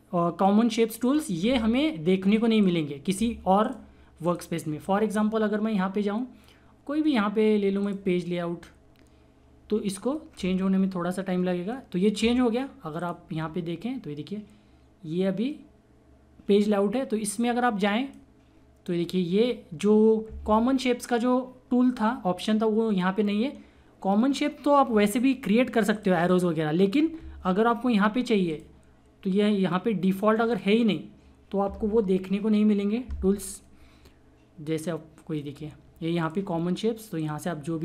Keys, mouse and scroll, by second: 7.8 click, 12.9 click, 17.3 click, 17.4-20.8 drag, 25.9 click, 28.5 click, 32.9 typing, 34.7-36.2 drag, 34.8 typing.